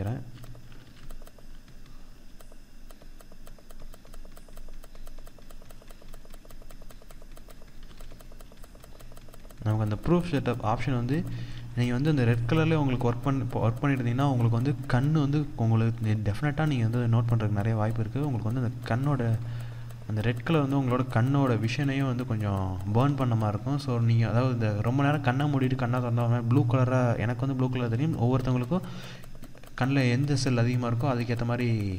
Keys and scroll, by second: 0.3 ctrl+=.